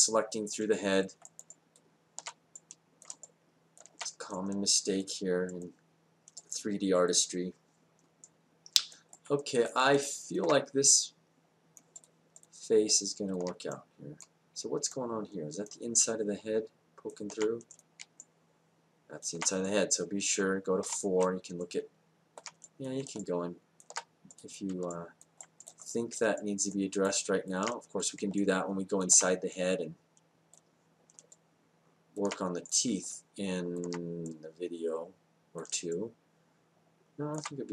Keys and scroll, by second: 20.8 4.